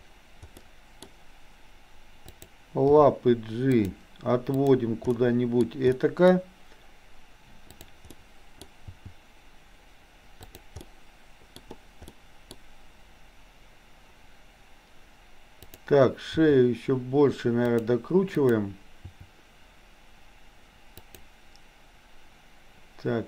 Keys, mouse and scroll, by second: 0.6 middle click, 2.3 click, 3.0 g, 4.8 click, 5.1 middle click, 5.9 middle click, 7.8 click, 8.1 middle click, 8.9 g, 10.8-11.6 middle drag, 12.1-12.5 scroll up 1, 12.5-15.6 scroll down 1, 15.6 click, 16.4 r, 18.4 click, 19.1 r.